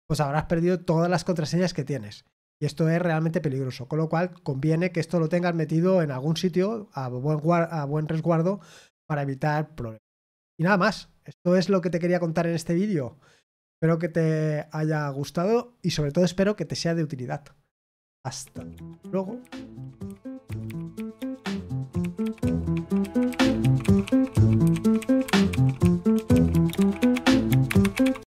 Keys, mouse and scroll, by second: 28.3 click.